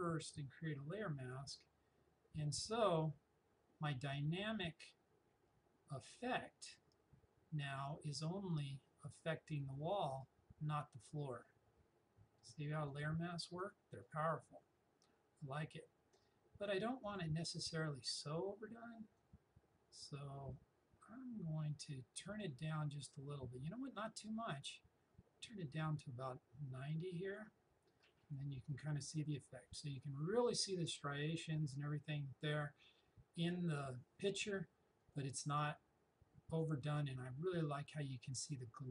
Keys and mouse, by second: 8.5 click, 17.1-28.2 drag, 35.0 click.